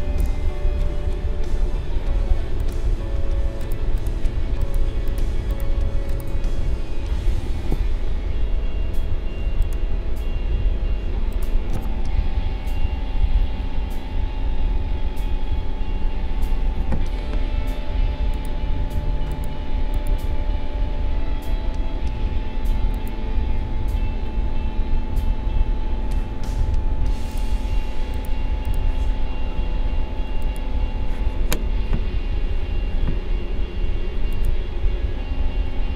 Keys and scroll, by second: 9.4 a, 13.2 Delete.